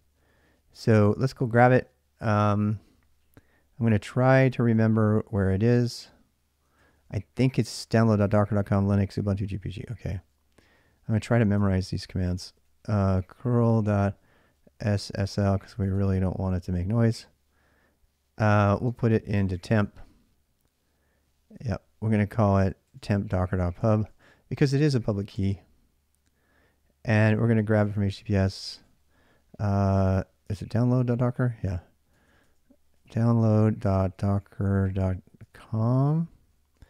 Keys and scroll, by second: 0.0-1.9 typing, 5.5 ctrl+a, 5.7 ctrl+a, 6.7 ctrl+a, 9.5 ctrl+a, 9.6 ctrl+a, 11.4 ctrl+a, 11.6 ctrl+a, 12.2 ctrl+a, 12.3 ctrl+a, 12.6-15.7 typing, 18.1-20.0 typing, 21.2-25.1 typing, 26.9-36.8 typing, 31.0 ctrl+a, 31.1 ctrl+a, 36.2 ctrl+a.